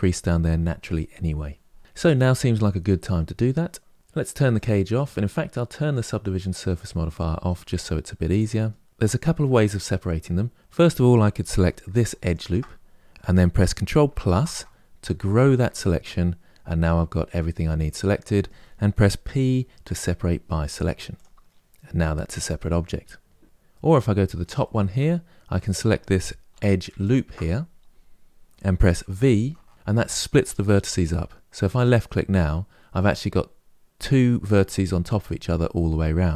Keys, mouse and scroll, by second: 1.8-3.6 scroll down 1, 3.9 Tab, 4.3 click, 6.4 click, 7.5-10.7 middle drag, 11.3 3, 11.9 alt+click, 14.0 ctrl+KP_Add, 15.3-18.3 middle drag, 19.0 p, 23.4-24.9 middle drag, 24.9-26.2 scroll up 1, 26.2 2, 26.7 alt+click, 28.9 v.